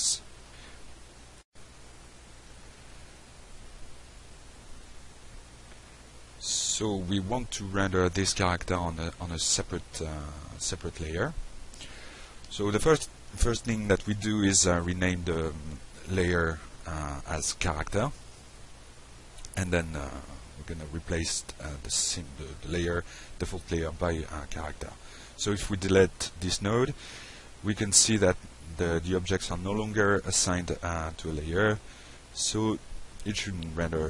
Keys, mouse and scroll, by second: 3.1 click, 4.2 click, 5.3 click, 6.5 click, 7.1 click, 8.2 click, 15.1 click, 15.9 click, 17.9 click, 18.4 click, 19.3-20.9 typing, 21.2 Return, 22.9 click, 23.8 middle click, 25.1 click, 28.4 Delete, 29.8 drag, 30.2 middle click, 30.8 click, 32.7 click, 33.0 click.